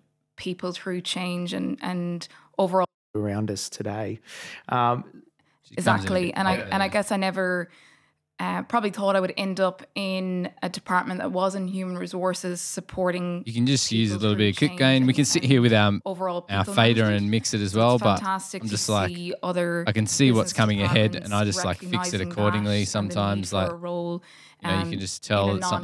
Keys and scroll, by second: 0.9 f, 1.0 f, 2.4 F8.